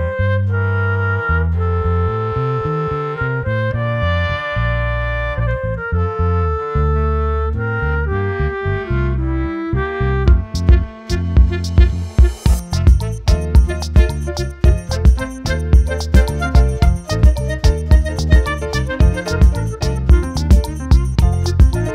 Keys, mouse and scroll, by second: 0.9-1.8 drag, 2.9-3.8 drag, 5.4-6.9 drag, 7.1 typing, 8.7 typing, 9.9 typing, 11.1-12.7 drag, 17.0 click, 18.5 shift+middle click, 20.3-21.8 drag.